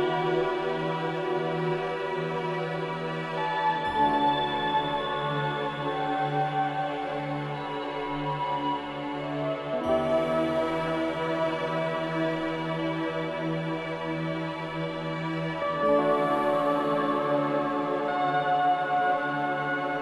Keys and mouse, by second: 0.5 `, 1.3 `, 3.0-3.8 shift+middle drag, 4.8 `, 5.5 `, 6.9 F4, 8.1 Tab, 9.3 KP_Enter, 11.1 Tab, 11.7 Tab, 13.7 click, 14.7-15.8 drag, 16.1 Tab.